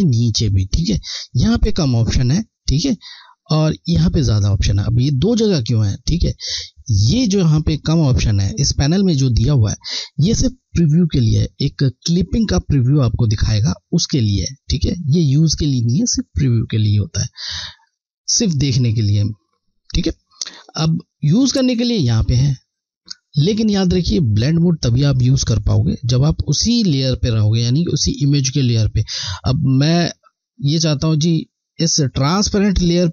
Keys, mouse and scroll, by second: 4.1 Left, 20.5 click, 26.1 click, 29.9 click.